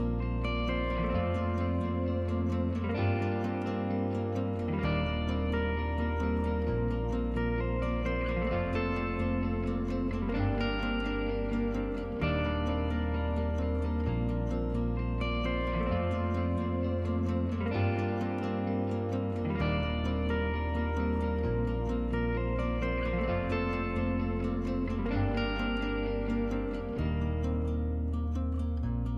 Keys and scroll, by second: 9.5-11.7 typing.